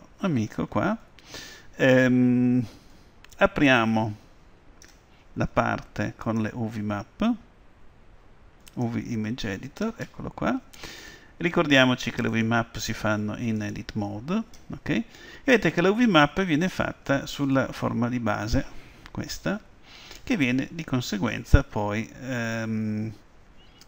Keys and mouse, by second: 3.8-5.7 drag, 6.3-8.2 drag, 11.2-12.4 middle drag, 12.4-14.3 drag, 17.5-19.4 middle drag.